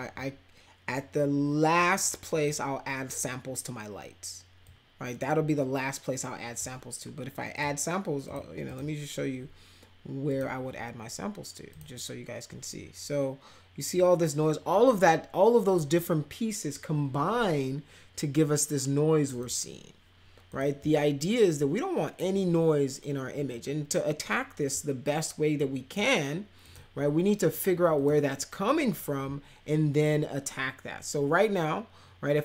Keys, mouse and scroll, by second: 1.8 click, 4.6-6.6 drag, 7.5 click, 8.2 click, 8.7 click, 10.3 click, 11.7 click, 19.4 click, 20.5 click, 24.7-25.9 drag, 26.6 click, 27.9 click.